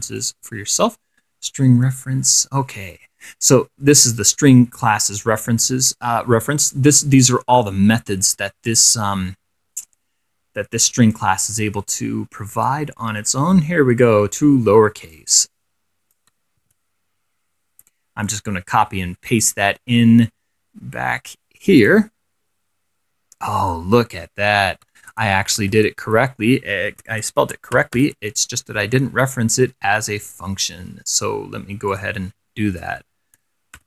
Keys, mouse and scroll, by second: 0.4 click, 4.8-5.4 scroll down 2, 5.4 scroll up 2, 5.6-6.0 scroll down 2, 7.0-8.3 drag, 9.9-11.6 drag, 11.7 middle click, 11.9-12.6 scroll up 1, 13.1-13.4 scroll down 2, 15.4-16.6 drag, 16.8 ctrl+c, 18.5 click, 19.6 click, 21.5 click, 22.3 middle click, 23.8 click, 25.2 ctrl+4, 25.9 ctrl+shift+6, 27.1 ctrl+v, 27.8-28.7 typing, 29.0-31.0 scroll down 4, 31.0-31.5 scroll up 2, 32.1 click, 33.0-33.8 typing.